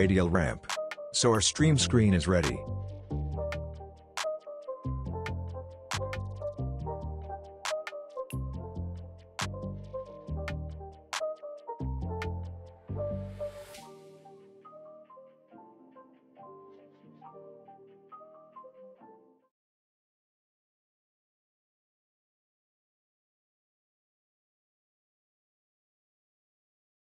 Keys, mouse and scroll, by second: 0.0-0.7 scroll down 1, 0.7-1.0 scroll up 1, 1.0-1.8 scroll down 1, 1.8-2.5 click, 2.4 space, 5.7 space, 6.5 click, 9.1-9.7 click, 10.0-10.5 scroll up 1, 10.5-11.2 scroll down 1, 11.2 click.